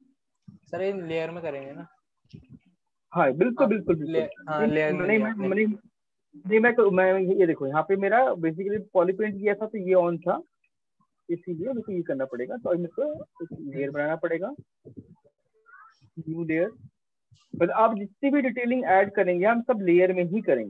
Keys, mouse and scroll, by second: 0.0 click, 1.5 click, 2.6 right click, 5.2 alt+click, 9.0 click, 10.3 alt+click, 10.4 click, 11.9 shift+click, 13.3 click.